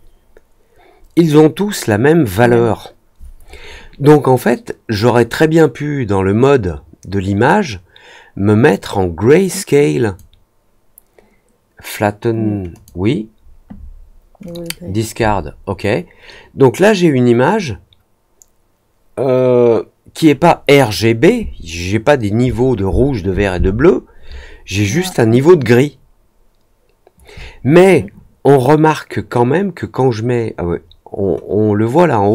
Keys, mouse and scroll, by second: 5.3-10.1 drag, 12.7 click, 14.4 click.